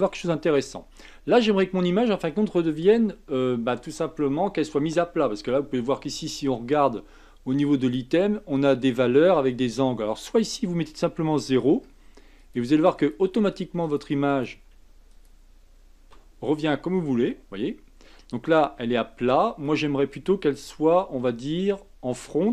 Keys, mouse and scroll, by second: 7.8 click, 10.2-12.5 drag, 12.9-13.9 drag, 14.3-16.8 drag, 16.8-17.2 scroll down 2, 17.2-20.3 middle drag, 21.0 KP_1.